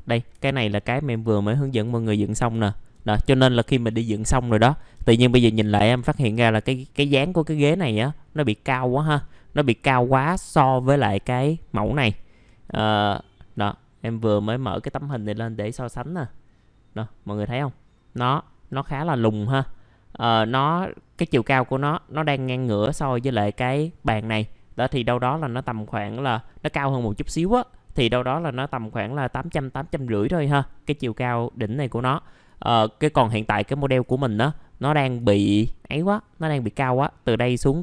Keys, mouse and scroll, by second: 2.0-2.5 scroll up 1, 2.6 alt+middle click, 5.0 alt+middle click, 6.0 scroll down 1, 6.3 alt+middle click, 9.2 alt+middle click, 11.8 scroll down 1, 12.1 alt+middle click, 12.6 click, 13.0 middle click, 14.2 click, 15.3-15.9 scroll up 1, 15.9 middle click, 18.5-19.5 scroll down 1, 19.5 middle click, 19.7-26.5 scroll down 1, 32.4 click, 33.2 right click, 33.8 click, 35.2 ctrl+right click, 36.0-37.8 drag.